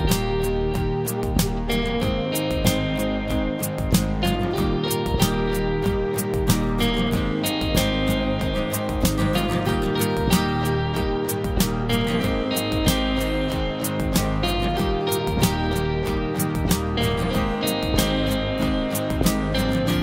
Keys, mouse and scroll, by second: 2.0 click, 2.8 scroll down 1, 4.8 click, 5.4 scroll down 1, 8.5 scroll down 1, 13.9 scroll up 1, 14.1 [, 15.0 click, 15.6 scroll down 1, 17.9-18.8 scroll up 1, 17.9 typing, 19.4 scroll up 1, 19.4-19.9 typing.